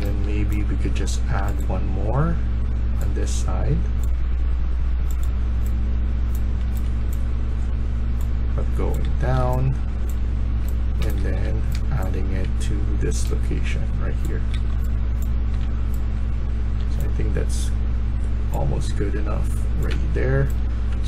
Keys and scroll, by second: 5.3-6.9 typing, 8.9-12.3 typing, 14.2-14.9 typing, 19.8-21.0 typing.